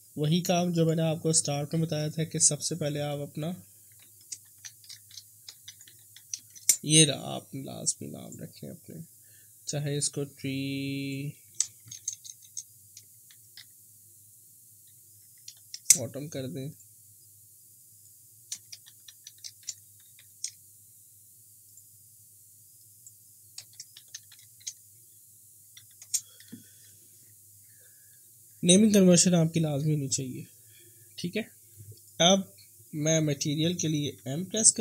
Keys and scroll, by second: 4.2-5.9 typing, 6.5 Return, 11.6-15.5 typing, 15.8 Return, 18.4-20.2 typing, 23.5-26.1 typing, 34.2 m.